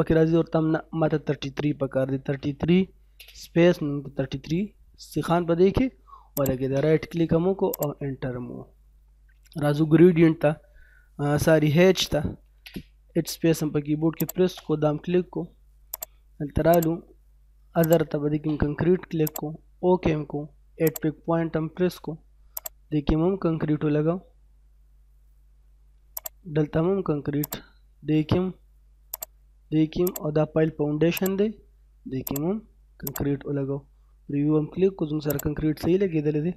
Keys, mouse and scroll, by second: 1.8-2.6 typing, 3.3-3.6 scroll down 1, 3.6 middle click, 4.1 scroll down 1, 4.5 middle click, 6.4 right click, 7.7 click, 8.5 middle click, 12.1 h, 12.3 space, 14.2 click, 21.8 scroll up 1, 22.5 click, 22.9-23.5 scroll down 1, 25.0 scroll up 1, 26.2 click, 31.6-32.3 scroll down 1, 32.3 right click, 33.0 click, 34.1-34.7 scroll up 1, 35.0 scroll down 1, 35.3 right click, 35.8 middle click.